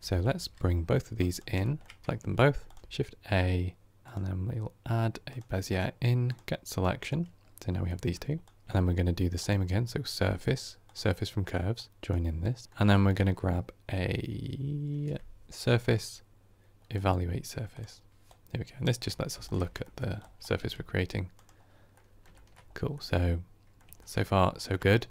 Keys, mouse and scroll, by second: 0.0 ctrl+space, 1.3 click, 1.5 shift+middle drag, 1.7 shift+scroll down 1, 1.8 scroll up 6, 2.0 scroll down 1, 2.2-19.4 shift+middle drag, 19.4 ctrl+shift+click, 21.8-22.5 middle drag, 22.5 scroll up 2, 22.8-25.1 middle drag.